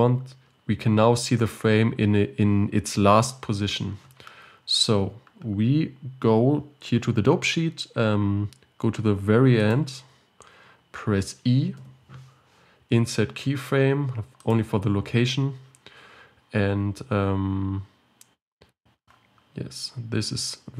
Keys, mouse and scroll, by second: 0.5-2.0 scroll up 4, 2.0-2.5 scroll down 3, 4.3-6.6 scroll up 2, 9.8-14.6 drag, 19.8-20.4 scroll down 5, 20.4-20.7 scroll up 2.